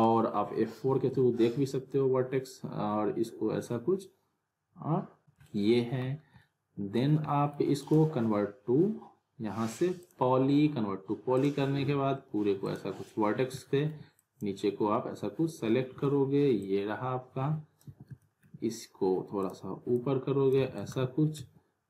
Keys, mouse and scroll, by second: 0.4 F4, 1.1 F4, 5.2 z, 5.5-6.1 alt+middle click, 6.2 scroll down 1, 6.3 alt+scroll up 1, 6.4-7.0 alt+middle click, 7.0 scroll down 1, 7.2 alt+middle click, 7.8 right click, 10.0 click, 13.6 alt+middle click, 14.2 click, 15.9 r, 16.6-17.2 click, 17.8 w, 18.2 alt+middle click, 19.4 click, 20.7 alt+w, 21.3 z.